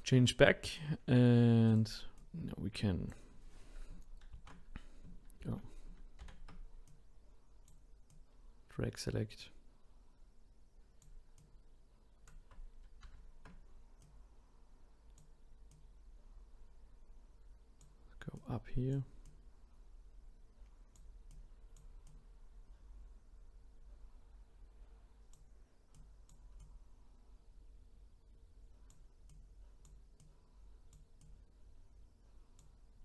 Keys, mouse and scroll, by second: 1.7 click, 2.2 click, 4.3 ctrl+t, 5.4 ctrl+z, 6.2 ctrl+z, 6.9 click, 8.1-11.1 drag, 11.4 click, 13.0 ctrl+z, 14.0 click, 15.7 click, 19.2-22.0 drag, 22.1 click, 26.0 click, 26.6-29.4 drag, 30.2 click, 31.2 click.